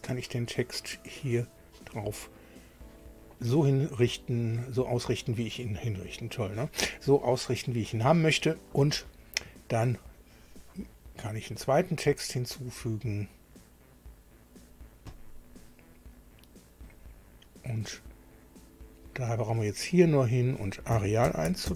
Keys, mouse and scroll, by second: 1.3 click, 15.1 click, 19.0 click, 20.3 click, 20.7-21.7 typing.